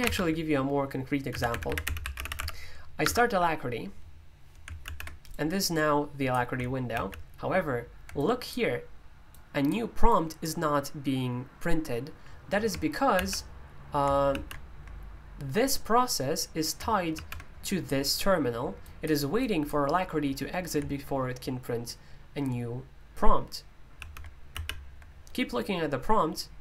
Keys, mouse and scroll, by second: 1.4-2.8 typing, 3.0 Return, 5.3-26.6 drag, 5.3 typing.